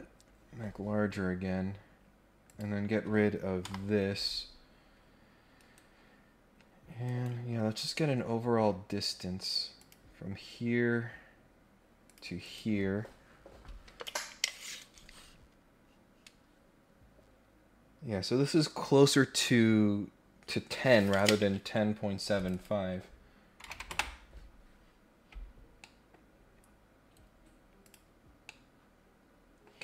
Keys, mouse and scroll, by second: 0.4 scroll up 1, 0.7 scroll down 1, 0.8 scroll up 1, 0.8 scroll down 1, 1.1-1.6 scroll up 2, 2.4 click, 3.6 Delete, 6.2-6.6 scroll down 3, 7.0 right click, 7.7-8.9 scroll up 4, 9.8 click, 10.2 scroll up 2, 10.4-11.0 scroll down 4, 12.0 click, 12.4 click, 22.3 click, 25.6 scroll down 1, 25.8 middle click, 26.2-26.7 scroll up 2, 27.8 click, 28.4-29.6 middle drag.